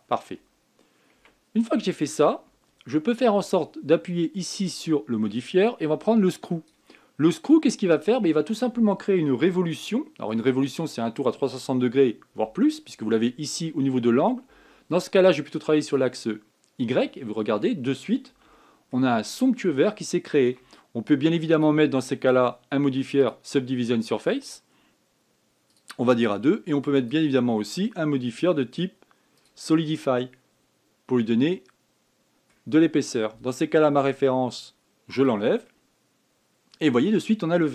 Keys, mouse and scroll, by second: 0.1-0.6 scroll down 4, 0.6 scroll up 2, 1.5 scroll down 2, 1.9 Tab, 3.4 scroll down 4, 5.6-7.9 drag, 7.9-8.4 scroll down 7, 8.7-10.2 scroll up 1, 10.3-13.4 shift+middle drag, 16.6 click, 18.0 scroll up 4, 19.3-20.0 shift+middle drag, 20.0 scroll up 2, 20.5-22.2 shift+middle drag, 22.2-25.3 drag, 26.5-30.7 drag, 30.8-33.8 middle drag, 35.9 click, 36.4-37.7 middle drag.